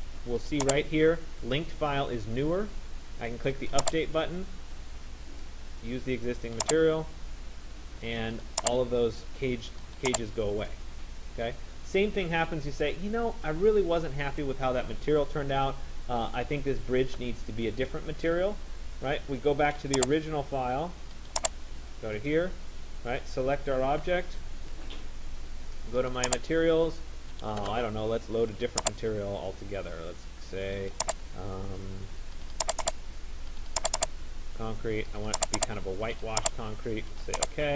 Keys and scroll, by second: 23.8 ctrl+a.